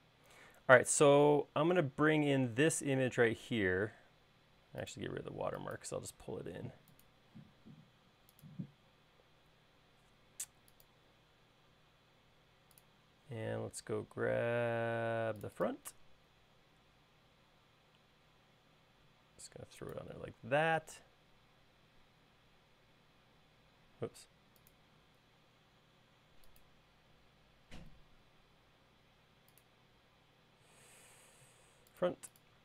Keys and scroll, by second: 21.5 space.